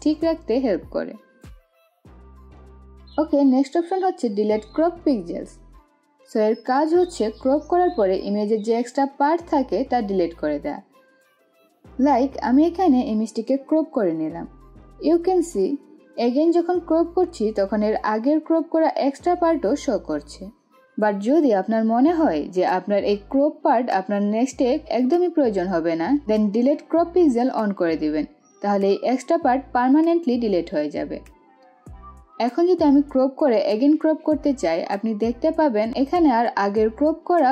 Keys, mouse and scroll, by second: 8.7-12.6 drag, 12.6-15.1 drag, 17.3-22.8 drag, 23.1 click, 27.3 click, 28.4-30.9 drag, 33.3-36.7 drag.